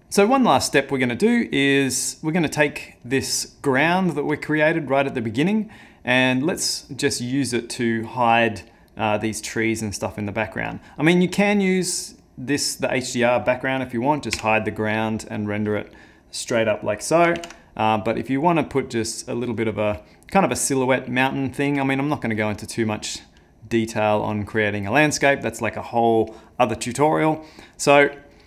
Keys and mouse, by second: 3.0 click, 3.5 click, 14.4 h, 17.4 ctrl+z, 18.3 click, 19.1 click, 21.6 click, 22.4 click, 22.9 click, 23.8 middle click.